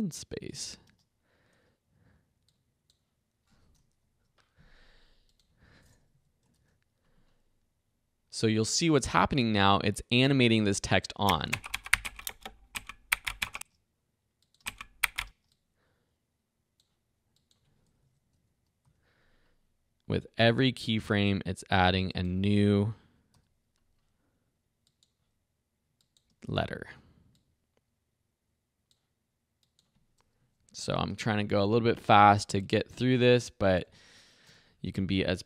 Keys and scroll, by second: 0.9 space, 6.1 Right, 6.5 shift+i, 11.2 space, 13.5 space, 18.0 Right, 18.8 ', 22.8 Right, 23.3 m, 26.3 space, 30.4 Right, 31.0 shift+p, 34.5 h.